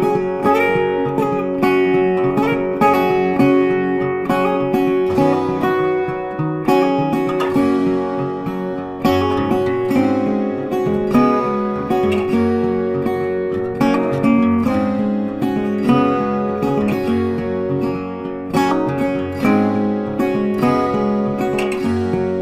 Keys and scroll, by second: 1.5 ctrl+t.